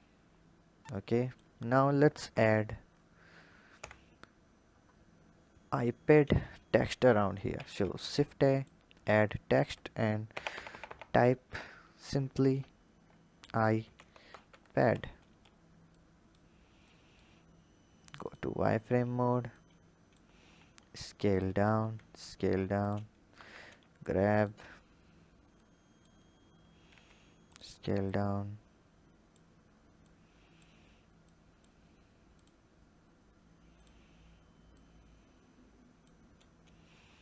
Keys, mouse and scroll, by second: 1.9 ctrl+KP_7, 2.8-3.5 scroll down 3, 3.5 KP_7, 4.5-7.3 scroll up 3, 7.3 shift+a, 9.3 Tab, 10.1 BackSpace, 10.3 BackSpace, 10.4 BackSpace, 10.6 BackSpace, 13.0 i, 13.5 shift+p, 13.9 a, 14.1 d, 14.6 Tab, 15.7 click, 16.7 click, 18.1 click, 18.4-19.4 scroll up 3, 19.4-20.4 drag, 20.4 s, 21.8 s, 23.1 g, 24.5-25.4 scroll up 4, 25.4 click, 26.1-26.8 scroll up 3, 26.8 s, 27.9 click, 29.9 click, 31.1 click, 32.1-34.6 drag.